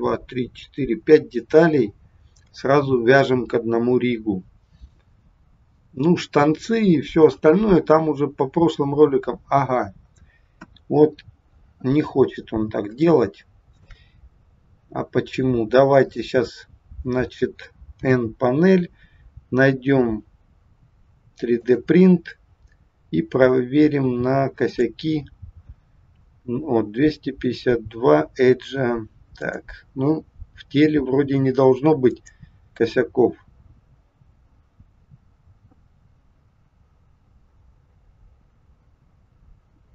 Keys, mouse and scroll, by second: 10.6 KP_1, 12.4-13.0 scroll down 1, 13.1 shift+middle click, 14.1-14.7 scroll down 1, 14.8-15.6 scroll up 2, 15.9 click, 17.9 n, 21.6 click, 29.3 click, 32.1 click.